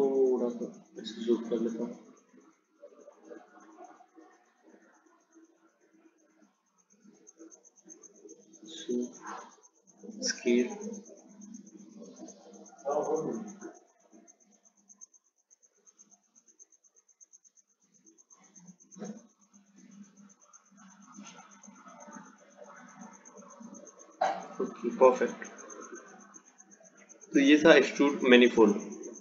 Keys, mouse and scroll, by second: 0.9-3.9 drag, 4.2-6.7 drag, 6.7-7.4 scroll down 1, 7.4-8.0 scroll up 2, 8.0-10.0 scroll up 2, 10.4 s, 25.1 click.